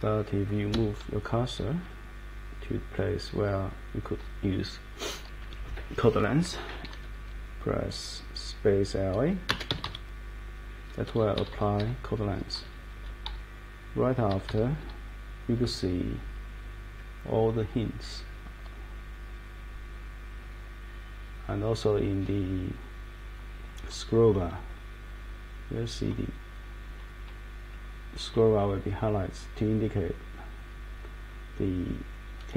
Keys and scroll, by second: 0.7 Escape, 9.4-10.3 typing, 11.4 Down, 11.5 Down, 11.8 Page_Down, 12.5 Down, 12.7 Down, 13.3 Page_Down, 14.3 Page_Down, 14.8 Page_Down.